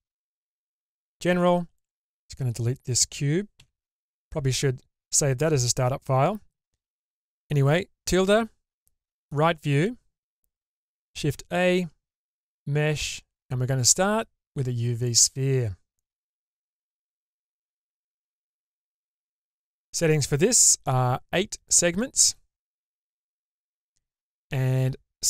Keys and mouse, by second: 1.7 click, 3.6 Delete, 11.1 shift+a, 18.2-18.9 shift+middle drag, 19.8 ctrl+`.